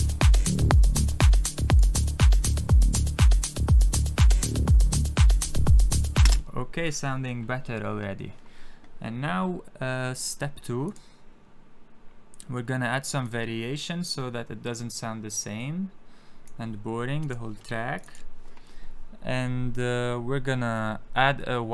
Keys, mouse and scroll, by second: 1.6 click, 6.2 space, 6.8 click, 10.8 click, 13.1 click, 17.1 click.